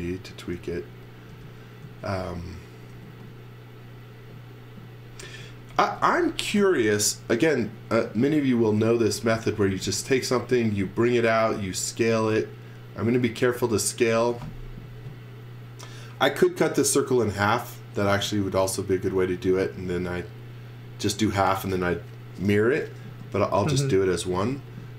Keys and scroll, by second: 1.3 space, 1.8 z, 2.9 b, 5.2-6.5 typing, 8.6 z, 9.5 space, 10.1 s, 24.5 z.